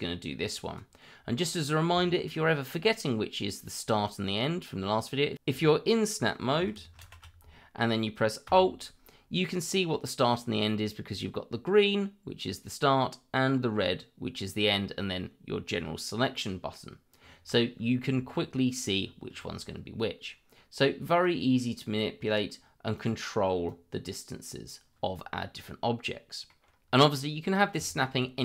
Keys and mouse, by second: 2.1 shift+middle drag, 7.0 ctrl+shift+v, 21.2-22.3 drag, 22.9 click, 23.6-24.6 drag, 25.6 middle click, 27.0 middle click, 27.8 shift+middle click.